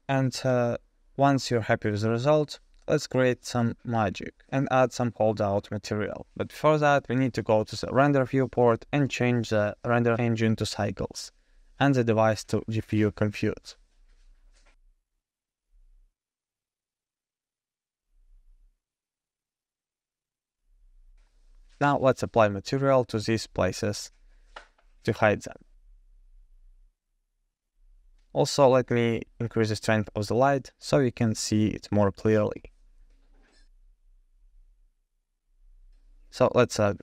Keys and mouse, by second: 6.6 click, 9.9-11.8 drag, 13.6-14.9 drag, 27.8 click, 28.5-30.3 drag, 30.9 click.